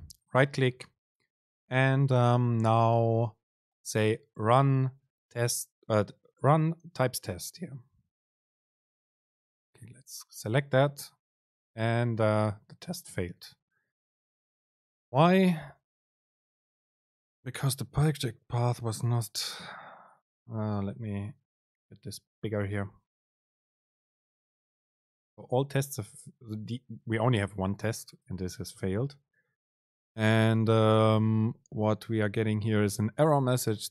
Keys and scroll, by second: 8.8 ctrl+shift+r.